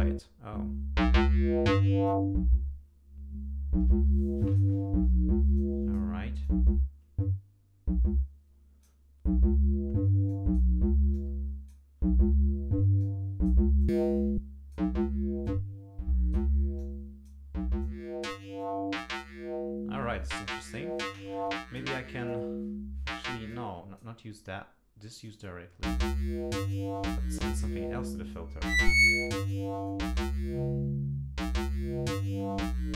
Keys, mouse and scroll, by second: 2.1-4.8 drag, 5.6 click, 6.4-9.0 drag, 10.3 click, 11.1 click, 13.0 click, 13.8-14.9 drag, 15.5-16.5 drag, 16.8 click, 17.8 click, 18.6 click, 22.3-23.3 drag, 23.5 click, 25.2-26.9 drag, 28.3-29.7 drag, 29.9-32.9 drag.